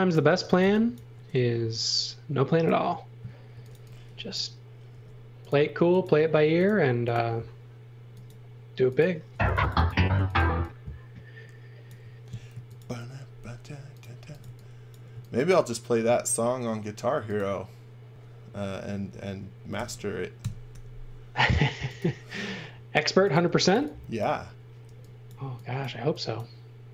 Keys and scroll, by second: 0.1-1.1 typing, 3.2-4.9 typing, 9.2 space, 10.1 x, 10.4 v, 12.2 m, 13.9-15.1 typing, 16.2 s, 19.8 1, 20.4 Return, 20.7 m, 23.3-24.8 typing.